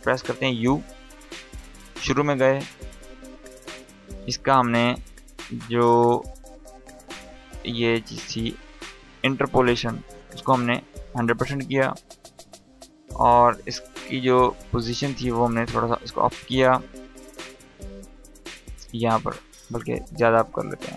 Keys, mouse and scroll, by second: 0.8-1.4 drag, 9.3-10.6 drag, 14.1-19.1 drag.